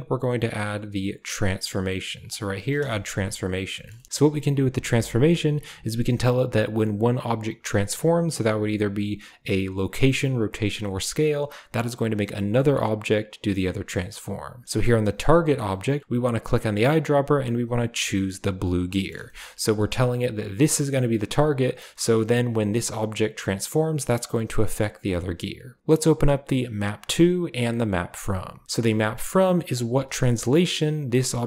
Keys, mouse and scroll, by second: 2.9 shift+middle click, 3.7 shift+middle drag, 3.9 middle drag, 19.2 shift+middle click, 21.6 drag, 22.2 g, 24.1 drag, 24.3 g, 25.6 g, 26.6 click, 27.8 click, 29.6 click, 29.6 typing.